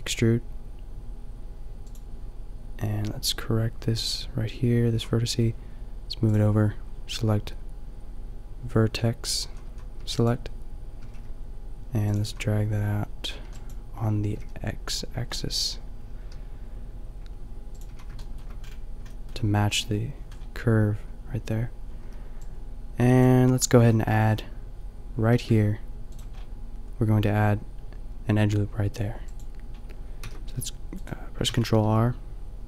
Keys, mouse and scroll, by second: 1.9-4.9 drag, 4.9 a, 6.2-8.2 drag, 9.5 a, 9.7 a, 9.9 b, 11.0 g, 12.2-14.2 drag, 12.3 a, 13.6 b, 14.3 g, 17.8 click, 17.9 a, 18.2-21.1 drag, 22.0 b, 23.7 a, 25.4 ctrl+r, 26.3 middle click, 30.3 ctrl+r, 31.5 ctrl+r.